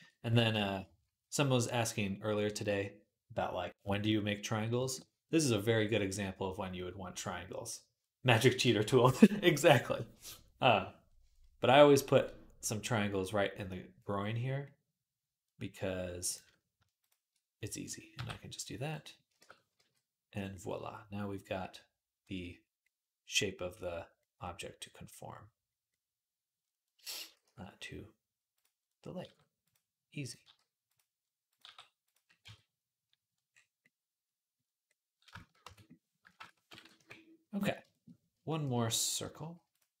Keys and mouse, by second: 16.1 middle click, 16.8 shift+click, 16.9-31.3 shift+middle drag, 17.9 j, 19.2 shift+Tab, 19.6 g, 27.2 g, 29.0 g, 30.2 g, 31.3 click, 31.4-35.6 middle drag, 31.4 g, 32.3 Tab, 35.4 Tab, 35.6-37.7 drag, 36.2 shift+Tab, 36.7 KP_3, 37.7-39.5 shift+middle drag, 39.5 click, 39.6-40.0 middle drag.